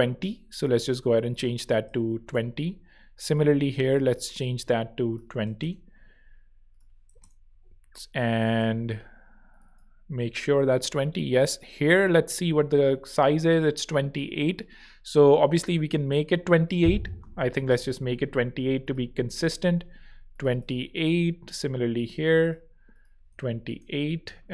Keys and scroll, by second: 1.2-2.2 typing, 5.0-7.5 typing, 17.2-18.0 typing, 23.0-23.9 typing.